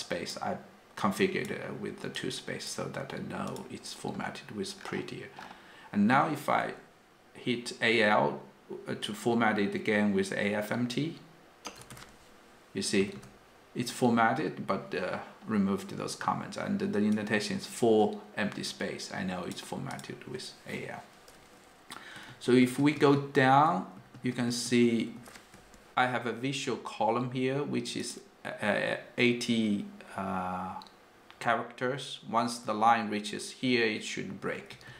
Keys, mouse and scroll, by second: 1.0 click, 1.1 click, 1.1-2.3 click, 2.2 click, 2.2 click, 2.3 click, 3.5 click, 11.8-13.2 typing, 17.2 click, 17.2 click, 17.3 click, 17.3-18.2 click, 18.0 click, 18.2 click, 18.5 click, 18.6 click, 18.7 click, 18.9 click, 22.3 ctrl+d, 22.6 ctrl+d, 22.8 ctrl+d, 22.9 ctrl+d, 23.6 ctrl+d, 23.7 ctrl+d, 24.0 ctrl+d, 24.1 ctrl+d, 24.3 ctrl+d, 24.5 ctrl+d, 24.6 ctrl+d, 24.8 ctrl+d, 25.0 ctrl+d, 25.1 ctrl+d, 34.7 ctrl+d.